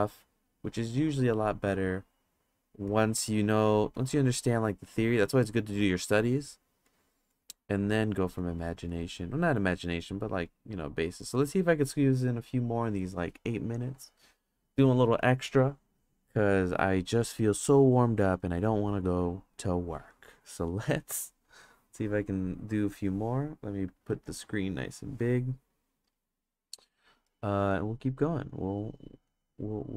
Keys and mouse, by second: 2.8 click, 3.1 click, 3.6 click, 3.9 click, 4.9 click, 6.6 click, 6.8 click, 7.3 click, 7.5 click, 8.3 click, 8.6 click, 8.9 click, 9.1 click, 9.5 click, 9.8 click, 10.4 click, 10.7 click, 11.1 click, 11.3 click, 18.5 click, 21.2 click, 24.2 ctrl+space, 28.5 click.